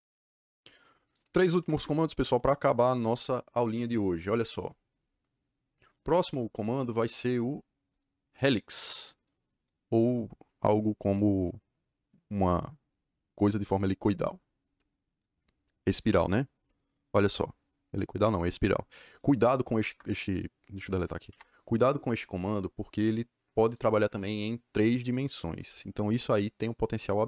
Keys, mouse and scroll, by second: 1.0 click, 1.3 Escape, 1.5 Escape, 1.7 Escape, 4.1 click, 7.8 click, 19.8 Escape, 20.2 click, 20.7 click, 21.2 Delete, 22.3 click, 23.6 click.